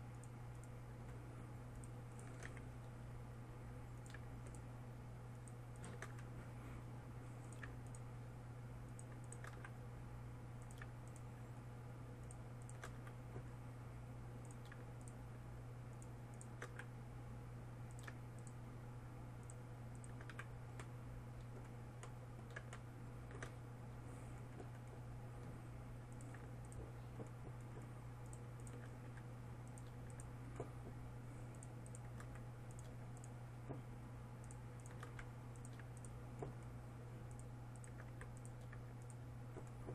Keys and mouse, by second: 3.0 f, 6.7 f, 10.2 f, 13.6 f, 17.3 f, 20.9 f, 24.2 middle click, 24.4-26.7 middle drag, 26.7-35.7 right drag, 29.7 f, 32.8 f, 35.7 f, 38.7 f.